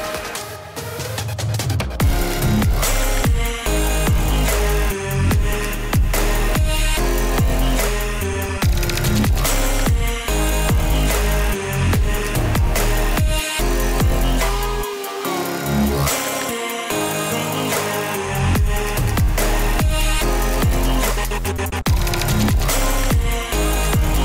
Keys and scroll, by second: 4.2 ctrl+t, 20.0 ctrl+t.